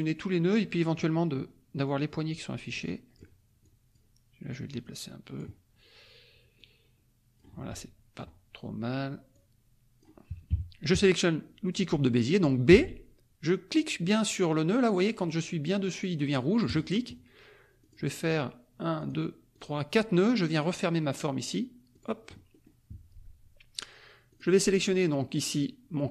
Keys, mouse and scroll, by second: 1.8-3.3 drag, 3.6 click, 4.8 click, 5.5-6.1 scroll up 1, 6.1-6.6 scroll up 1, 6.6-7.9 drag, 7.9-8.8 scroll up 1, 8.8-9.2 scroll up 1, 9.3-10.5 drag, 10.5 KP_Subtract, 12.7 b, 16.6 click, 17.8 click, 18.9 click, 19.5 click, 21.9 click, 22.5 middle click, 22.8 scroll up 1, 24.3 click, 25.3 click.